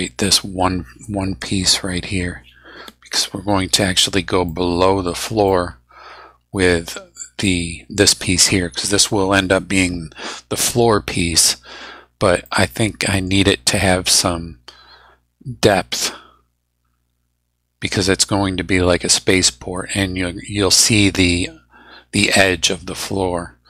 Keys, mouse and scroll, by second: 1.4 click, 4.5 middle click, 5.5-8.1 middle drag, 12.4-13.4 middle drag.